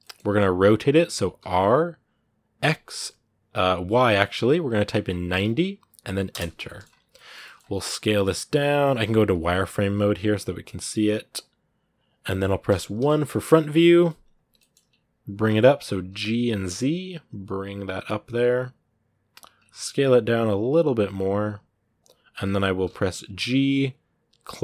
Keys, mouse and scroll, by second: 1.2 r, 6.4 middle click, 6.6 scroll up 2, 6.9 middle click, 7.3 scroll up 2, 7.6 s, 9.4-10.1 scroll up 1, 10.1 s, 12.8 KP_1, 14.4 shift+middle click, 14.6-15.0 scroll up 1, 15.0 g, 19.3 scroll up 1, 19.6 s.